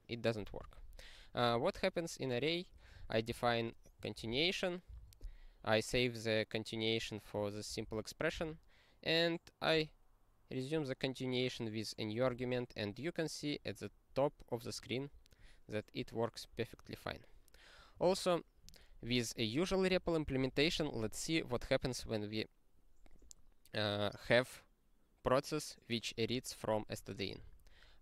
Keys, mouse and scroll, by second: 0.5 ctrl+n, 2.7 click, 3.3 ctrl+e, 4.1 ctrl+n, 4.3 ctrl+n, 4.9 ctrl+e, 7.7 ctrl+n, 7.9 ctrl+n, 8.3 ctrl+e, 13.4 click, 13.5 click, 13.7 click, 14.5 click, 14.5 click, 14.7 click, 14.8 click, 15.4 click, 16.8 click, 16.9 click, 18.0 ctrl+g, 20.2 ctrl+n, 20.3 ctrl+n, 20.5 ctrl+n, 20.6 ctrl+n, 20.7 ctrl+n, 20.9 ctrl+n, 21.0 ctrl+n.